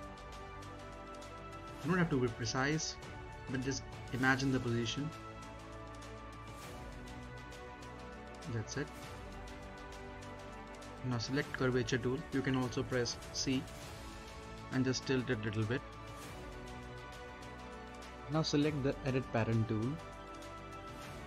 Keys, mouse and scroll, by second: 3.7 click, 5.1-6.5 scroll down 1, 6.5 click, 6.9-7.4 scroll up 1, 7.4 middle click, 8.7 click, 9.2-9.5 scroll up 1, 9.5-10.8 middle drag, 10.8-16.4 drag, 16.4-16.7 scroll up 1, 16.7 middle click, 17.3-17.7 scroll down 1, 17.7 middle click, 21.1 click.